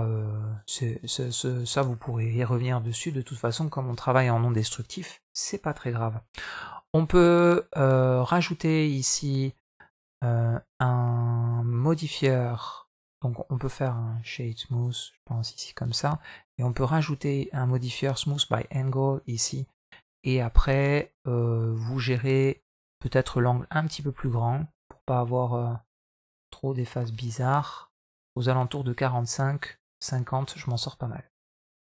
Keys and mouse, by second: 1.5 Tab, 1.9 middle drag, 2.5-2.9 middle drag, 9.5 right click, 12.2 click, 13.3-14.6 right drag, 16.5-18.4 drag, 19.0-19.5 middle drag, 19.9-20.9 middle drag, 22.6 shift+middle click, 23.6-30.0 drag, 30.4 middle drag, 30.8 middle click, 31.4-31.8 middle drag.